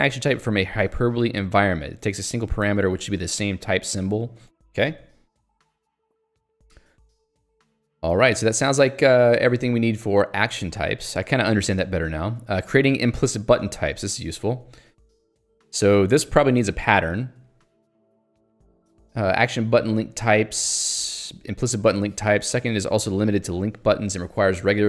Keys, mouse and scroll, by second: 2.0 Escape, 4.5 click, 4.6 Escape, 5.4 Escape, 6.3-6.7 scroll up 1, 10.4 middle click, 13.4 middle click, 14.2 Escape, 16.4-17.5 scroll down 1, 17.5-18.7 scroll down 1.